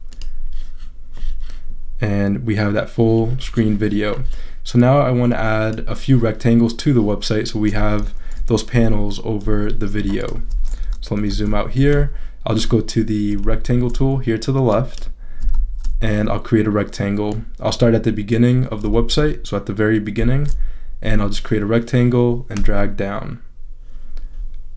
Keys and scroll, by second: 8.7 super+-, 10.8 super+-, 13.4 shift+super+z, 15.5 shift+super+z, 18.9 shift+super+z, 20.2 shift+super+z.